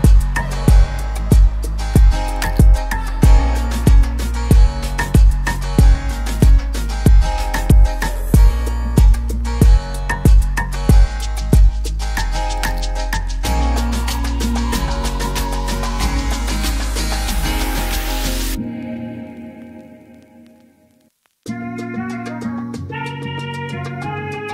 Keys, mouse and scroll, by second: 0.2 click, 0.7 8, 2.6 click, 3.4 8, 3.7 Return, 5.5 ctrl+d, 6.8 click, 9.8 9, 11.2 click, 11.8 9, 12.1 Return, 13.9 ctrl+d, 15.1 click, 17.3 click, 17.5 typing, 17.8 Return, 19.3 click, 19.8 typing, 20.3 Return, 21.9 ctrl+d, 23.7 click, 24.1 typing.